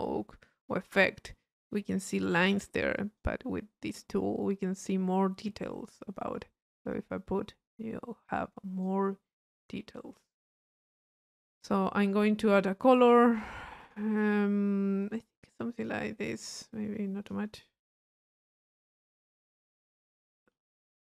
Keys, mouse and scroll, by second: 3.0 click, 3.5-6.8 middle drag, 6.8-9.2 drag, 13.8 click, 15.0 click, 16.7 click.